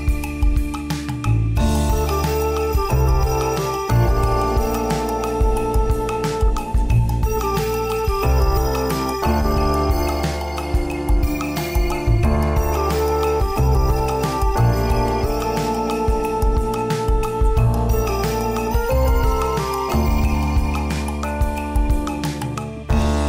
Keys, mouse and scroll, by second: 2.1 scroll down 1, 2.6 click, 6.2 click, 7.6 right click, 8.0 right click, 9.2 click, 10.7 click, 12.2 right click, 13.1 g, 14.5 s, 15.4 right click, 15.7 right click, 16.1 s, 18.2 right click, 18.5 right click, 18.8 s, 19.3 g, 20.3 s, 21.3 right click, 21.6 right click, 22.0 s.